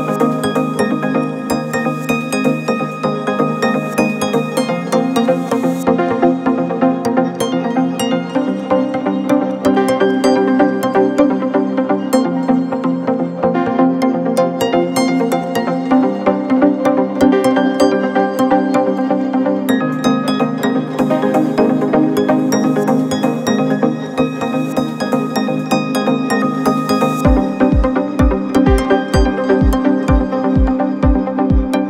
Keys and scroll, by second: 0.7 0, 0.8 Return, 5.3 9, 5.5 Return, 12.9 4, 26.0 ctrl+F1, 26.7 4, 29.1 1.